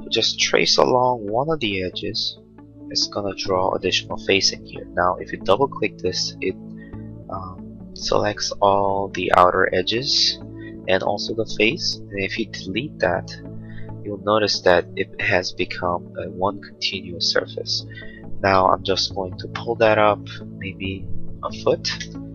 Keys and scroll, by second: 0.5 l, 3.7 space, 12.6 Delete, 21.3 1, 21.6 ', 22.0 Return.